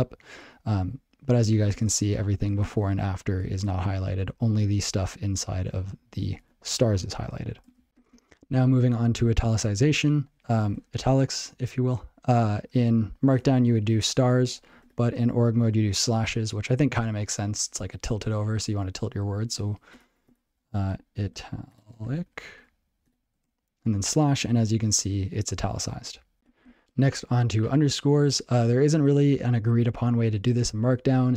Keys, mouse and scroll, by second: 7.9 ctrl+j, 14.3 *, 19.2-23.9 typing.